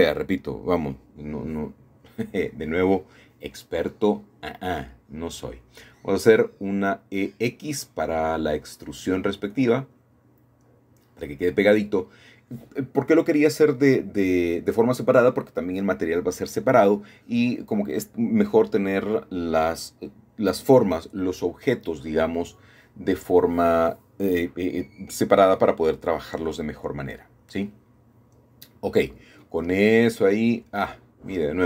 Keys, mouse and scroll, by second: 2.0 e, 9.0 shift+click, 9.9-11.1 middle drag, 13.3 click, 13.3 middle click, 14.3-16.2 middle drag, 16.4-16.8 scroll up 1, 16.6 middle click, 17.6-18.5 scroll down 2, 17.8 middle click, 19.6 ctrl+middle click, 19.8 ctrl+z, 20.2 ctrl+z, 22.0-23.1 shift+drag, 23.9-26.7 shift+middle drag, 27.2 scroll up 1, 28.0 shift+middle click, 30.2-31.6 drag.